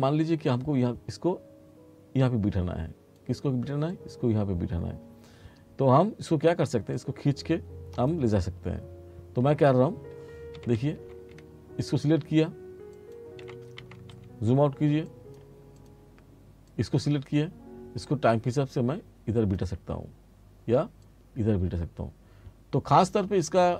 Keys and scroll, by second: 10.7 t, 13.5 r.